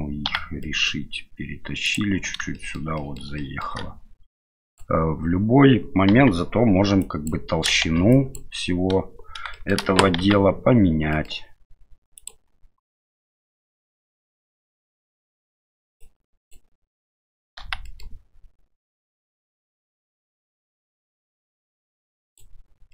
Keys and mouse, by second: 0.3 g, 2.6 shift+middle click, 3.0 middle click, 3.4 shift+middle click, 4.6 click, 6.1 KP_1, 7.1 click, 7.8 shift+z, 8.2 click, 9.5 shift+middle click, 10.2 g, 13.3 shift+middle click, 16.1 click, 17.6 g.